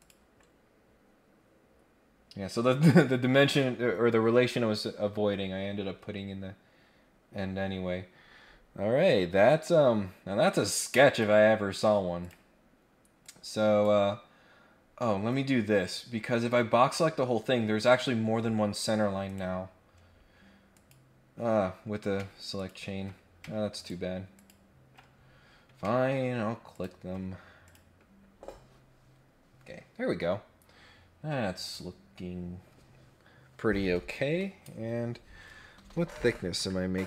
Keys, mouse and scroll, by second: 0.0 click, 7.1-7.5 scroll down 2, 9.7 scroll up 2, 10.5 click, 12.2 click, 12.5 scroll down 1, 13.2 click, 14.7 scroll up 1, 19.2 right click, 20.7 click, 22.6 ctrl+click, 23.7 ctrl+click, 24.3 ctrl+click, 25.1 scroll up 2, 25.4-25.7 scroll down 2, 25.7 scroll up 2, 26.7 ctrl+click, 27.6 click, 28.1-28.6 scroll down 2, 28.8-29.8 scroll up 2, 31.6 click.